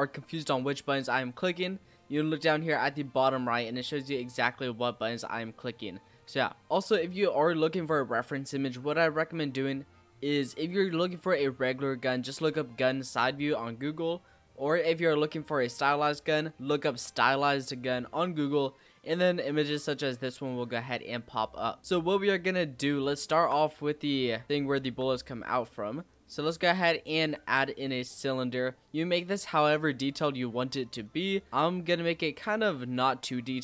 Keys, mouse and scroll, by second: 1.4-12.4 middle drag, 18.7-20.3 middle drag, 20.3 click, 21.8-22.1 scroll up 4, 22.4-22.7 scroll up 1, 22.9-24.4 shift+middle drag, 24.4 scroll down 2, 24.8 shift+a, 27.7-28.1 scroll down 5, 28.1-30.6 scroll up 5, 30.6 click.